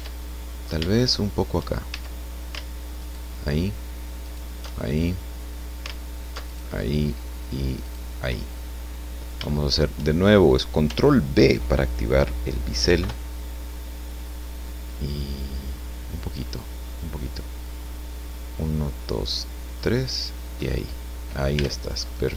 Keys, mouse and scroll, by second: 0.4-0.8 scroll up 1, 0.9 shift+middle click, 1.9 shift+a, 3.0 alt+shift+right click, 4.2 alt+shift+right click, 4.7-5.1 alt+shift+scroll down 2, 5.1 alt+shift+right click, 6.4 alt+shift+right click, 7.8 shift+right click, 8.5 shift+middle click, 10.2 shift+scroll up 2, 12.9 ctrl+b, 18.1 scroll up 2, 18.7 scroll up 2, 19.3 scroll up 2, 20.1 click, 20.7 scroll down 2, 21.6 Tab, 22.0-22.3 drag.